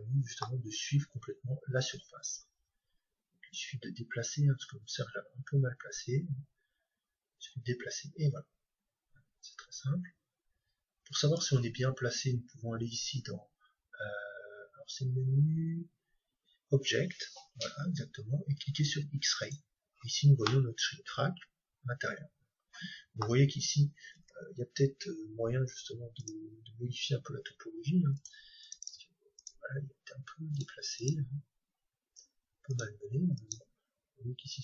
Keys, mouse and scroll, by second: 3.6-5.6 drag, 12.9-18.1 drag, 18.1-20.1 middle drag, 19.4-21.2 drag, 20.5-22.3 middle drag, 24.1 Tab, 24.9-26.2 middle drag, 26.2-28.2 right drag, 27.5 g, 28.2-30.1 drag, 28.7-32.7 right drag, 29.7 g, 31.4 g, 33.3-34.6 right drag.